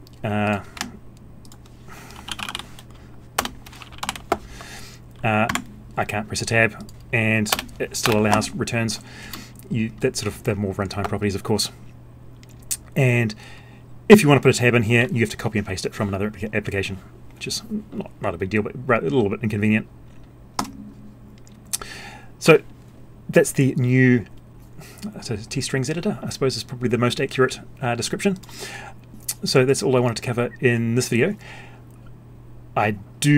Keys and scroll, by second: 4.0 alt+Down.